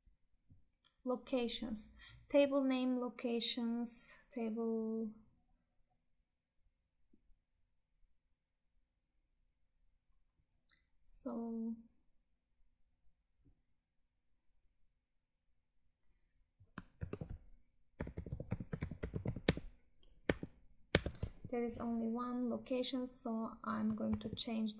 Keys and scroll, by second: 16.8 ctrl+f, 21.1 Escape, 24.2 Tab.